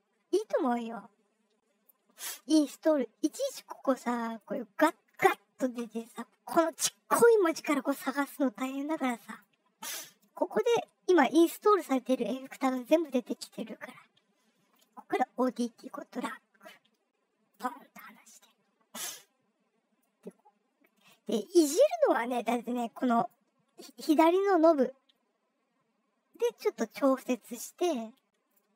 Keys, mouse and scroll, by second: 1.3-2.1 scroll down 6, 2.4 scroll down 2, 4.3 click, 9.3 click, 12.7-13.8 scroll down 6, 15.3-17.4 drag, 19.9-21.0 drag, 22.4 click, 24.6-28.5 drag.